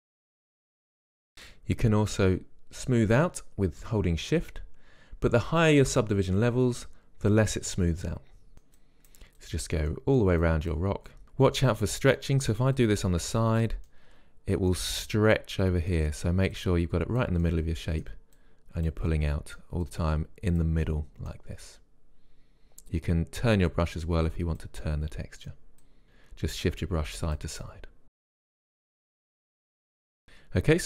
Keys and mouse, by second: 0.0 Return, 0.6 click, 2.5-5.2 drag, 8.3-10.0 drag, 10.0-12.1 middle drag, 13.0-14.3 drag, 14.3 middle click, 16.8-21.2 middle drag, 21.2-23.7 drag, 25.1-26.1 middle drag, 27.9 middle click, 28.2 click, 28.6 click, 29.2 middle click, 29.5 click, 30.0-30.8 middle drag.